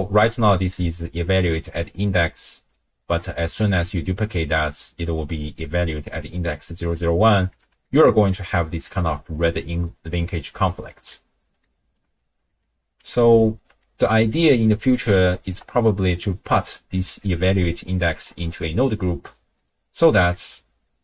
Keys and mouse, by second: 0.3 click, 1.6 click, 3.2 click, 3.6 ctrl+shift+d, 5.6 click, 7.5 n, 7.8 middle click, 8.0 click, 8.9 click, 11.1 click, 11.2 middle click, 12.5 click, 13.0 x, 13.8-14.4 drag, 16.3 ctrl+g, 17.9 drag, 20.3-21.0 drag.